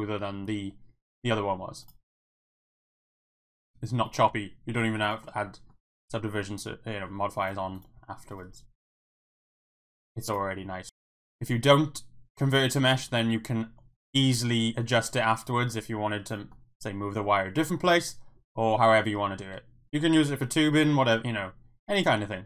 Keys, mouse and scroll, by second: 0.5 e, 1.8 click, 1.9 e, 2.6 click, 2.8 e, 3.3 click, 3.6 e, 4.1 click, 4.3 Tab, 4.7 middle drag, 5.2-5.7 middle drag, 5.8-7.1 middle drag, 7.4 click, 8.0 Tab, 8.3 click, 8.5 e, 9.4 click, 9.6 e, 10.6 e, 12.4-13.1 middle drag, 13.2 Tab, 14.0 click, 14.4 g, 16.3 click, 16.5 middle click, 19.4 Tab.